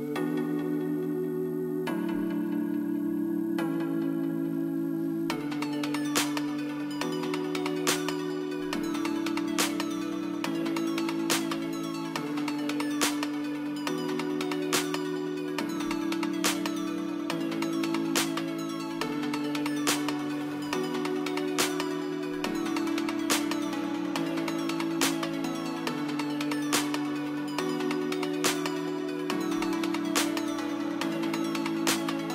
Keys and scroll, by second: 25.1 KP_3, 25.6 Return, 27.0 KP_2, 31.4 KP_1, 31.5 KP_0, 31.7 Return.